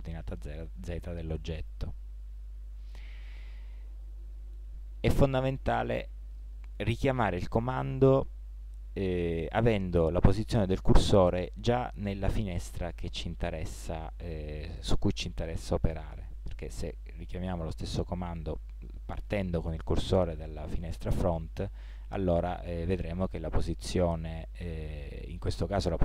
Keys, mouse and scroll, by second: 21.2 g.